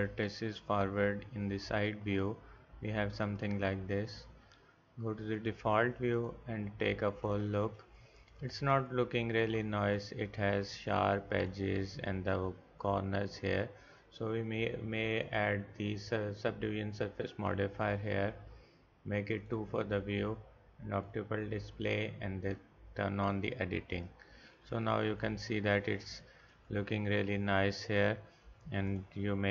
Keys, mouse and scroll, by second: 6.7 middle click, 9.3-13.4 drag, 19.4-22.7 drag, 23.3-25.1 drag, 25.1-26.4 middle drag.